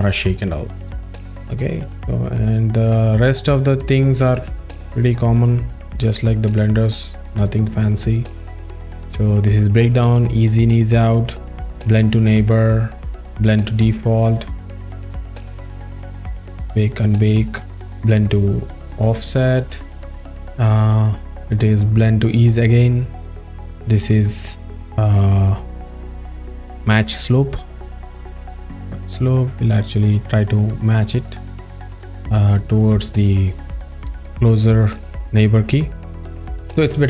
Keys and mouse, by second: 1.0 drag, 2.9 drag, 3.5 a, 4.7 click, 7.5 click, 8.5 right click, 11.3 click, 13.1 click, 15.2 click, 16.1 right click, 17.3 click, 19.4 right click, 20.0 click, 22.4 right click, 27.0 click, 28.1 right click, 28.9 click.